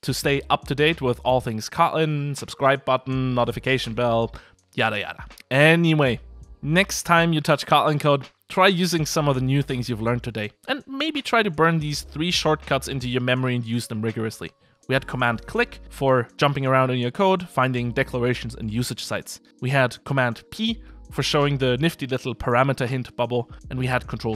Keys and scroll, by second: 24.2 ctrl+space.